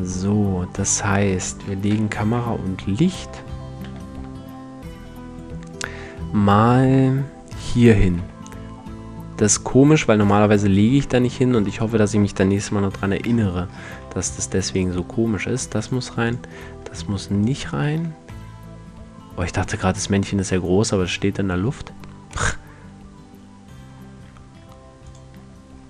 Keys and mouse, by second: 1.4 m, 3.4 m, 7.7 m, 11.3 right click, 12.2 KP_Decimal, 13.5 a, 17.9 middle drag, 18.6-19.8 middle drag, 21.8-22.5 middle drag, 25.4-25.7 drag.